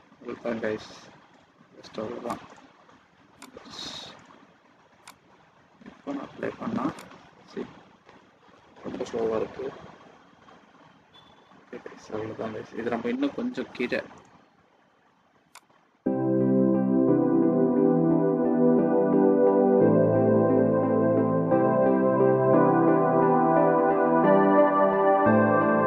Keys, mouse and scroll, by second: 2.3 click, 3.4 click, 7.0 click.